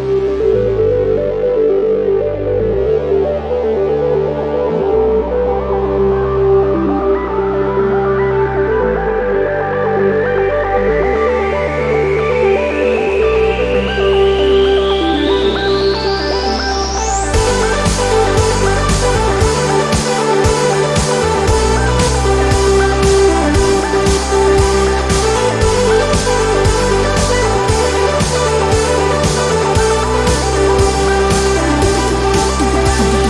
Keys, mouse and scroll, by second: 0.7-4.1 drag, 5.2 click, 7.7 click, 8.8 click, 9.8 ctrl+d, 10.5 ctrl+click, 13.5 space, 14.6 ctrl+d, 15.0-18.9 ctrl+drag, 18.9 space, 20.1 ctrl+d, 20.9 ctrl+click, 21.9-23.2 ctrl+drag, 23.1 ctrl+y, 23.8 ctrl+click, 24.7 ctrl+click, 24.8-25.5 ctrl+scroll up 2, 25.5-26.1 ctrl+scroll up 1, 26.1-26.7 ctrl+scroll up 1, 26.7 ctrl+space, 27.9 ctrl+d, 28.3-30.3 ctrl+drag, 30.5 space, 31.3 click, 32.2 space, 32.9-33.2 ctrl+scroll up 2.